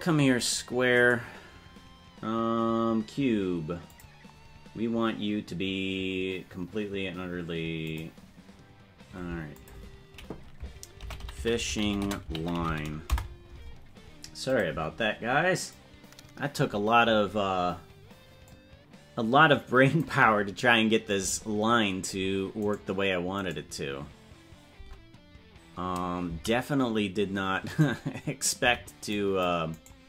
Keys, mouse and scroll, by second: 3.8 click, 7.8 click, 9.5-13.5 drag, 14.4 click, 18.4-20.0 drag, 22.7 right click, 24.7 Tab, 28.6 c.